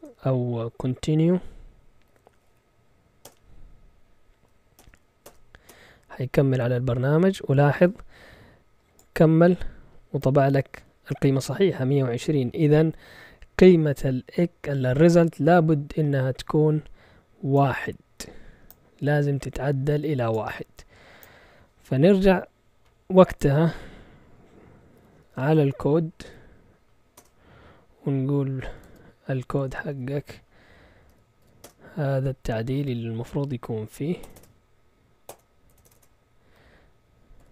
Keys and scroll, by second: 1.8-3.0 typing, 3.2 Return, 4.8 Return, 5.2-6.2 typing, 24.7-26.2 typing, 27.2 Return, 28.4-31.4 typing, 31.6 Return, 32.6-37.5 typing.